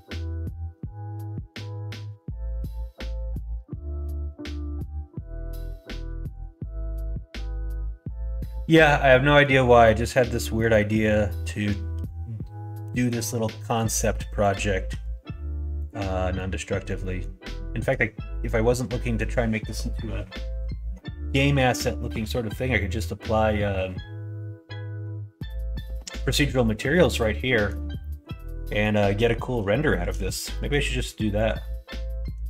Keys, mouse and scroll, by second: 0.0 middle click, 0.6 middle click, 1.3 middle click, 2.1 click, 2.4 middle click, 2.9 click, 3.1 middle click, 3.6 g, 5.5 s, 6.6 middle click, 7.7 shift+middle click, 8.8 middle click, 9.4 scroll down 1, 10.3 scroll up 1, 10.5-10.9 scroll down 2, 10.6 middle click, 11.9 g, 14.3 click, 14.8 g, 16.0 middle click, 17.0 middle click, 26.5 scroll up 1, 26.5 middle click, 27.4 scroll up 1, 27.5 middle click, 27.6 scroll down 1, 27.9 scroll up 1, 28.0-29.5 middle drag, 29.7 scroll up 1, 29.8 shift+middle click, 30.5 scroll up 1, 30.5 middle click.